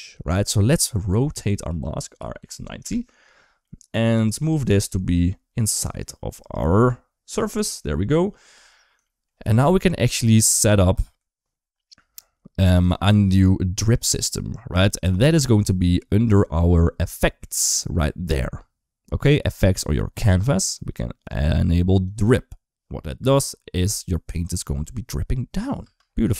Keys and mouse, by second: 0.6 click, 1.4 r, 3.4 middle click, 4.2 click, 4.5 g, 7.1 KP_3, 7.4 KP_1, 8.8 shift+middle click, 9.8 KP_3, 10.4 KP_1, 19.9 click, 21.9 click, 23.1 space, 25.8 space, 26.2-26.3 middle drag.